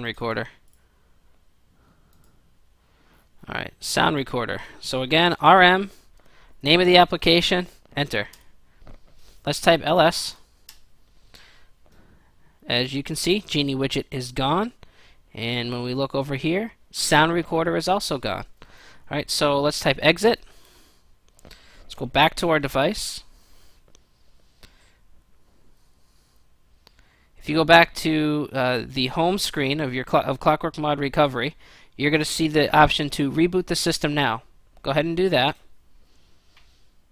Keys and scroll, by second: 4.9-5.7 typing, 6.5 ctrl+v, 8.3 Return, 9.6-10.3 typing, 10.6 Return, 19.6-20.7 typing.